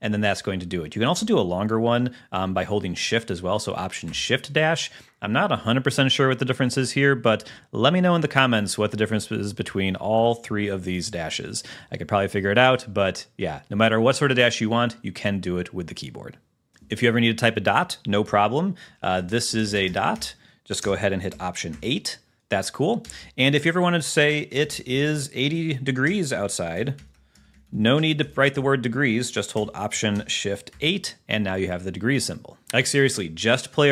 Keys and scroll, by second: 1.3 space, 4.2 alt+shift+-, 7.4 Left, 9.7 Left, 11.1 space, 11.3 -, 12.0 Right, 19.4-21.0 typing, 21.9 alt+8, 23.4 Return, 24.9 t, 24.9 space, 26.6 d, 27.0 BackSpace, 28.0 e, 28.5 alt+Left, 30.9 alt+shift+*, 32.6 super+`.